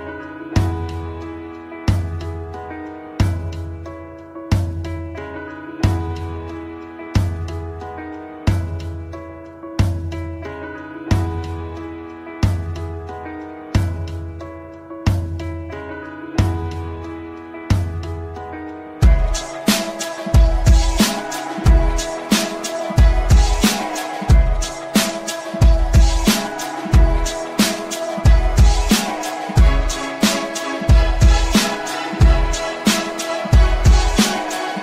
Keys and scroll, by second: 7.3 ctrl+Page_Down, 14.3 F3, 17.5 shift+F2, 19.7 Delete.